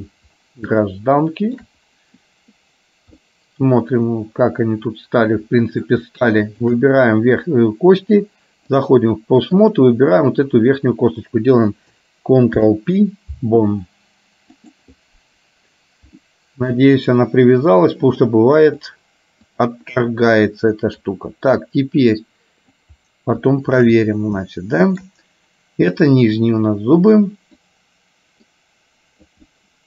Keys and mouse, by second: 0.9 shift+middle click, 3.4-6.0 middle drag, 8.2 click, 9.6 click, 12.6 ctrl+p, 16.4 shift+middle click, 18.2 click, 19.6 click, 21.1-22.9 drag, 23.6 shift+middle click, 24.5 shift+middle click, 26.4-27.7 drag, 28.6 click, 29.6-29.8 middle drag.